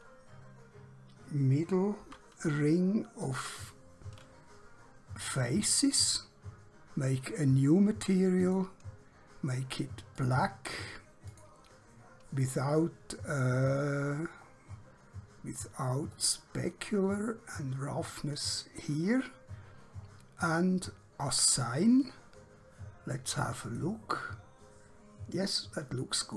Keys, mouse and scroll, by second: 2.0 3, 4.5 scroll down 1, 5.2 scroll up 1, 7.3 click, 14.4-16.1 scroll down 1, 16.1 click, 20.0-21.3 scroll up 1, 21.3 click, 26.2 click.